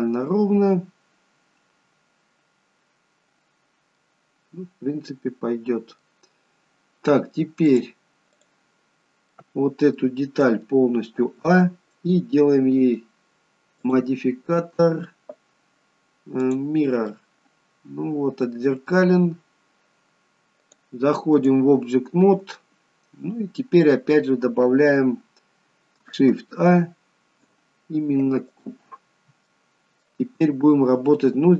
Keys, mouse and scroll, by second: 4.1 middle click, 7.8 click, 8.6 click, 9.1-11.4 scroll down 2, 9.4 middle click, 11.4 a, 12.9 click, 13.9 click, 17.2 middle click, 20.8 click, 22.7 middle click, 29.6 middle click.